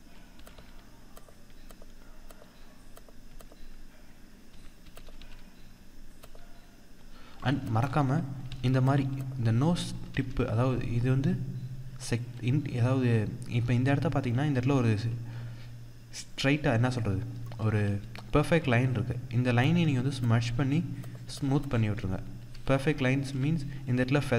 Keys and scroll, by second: 7.4 ctrl+=, 7.5 ctrl+space, 17.4 ctrl+-, 18.4 ctrl+=, 23.1 ctrl+=.